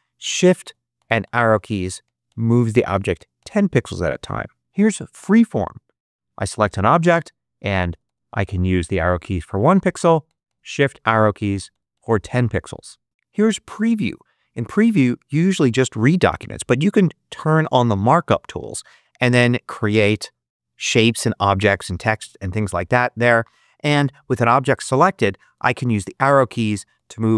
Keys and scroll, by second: 0.2 shift+Up, 1.4 shift+Right, 2.2 shift+Down, 2.8 shift+Left, 7.6 Left, 8.2 Up, 8.7 Right, 9.3 Down, 9.9 shift+Down, 10.2 shift+Left, 10.7 shift+Right, 11.3 shift+Up, 11.8 shift+Down, 25.1 Left, 25.8 Up, 26.7 Right.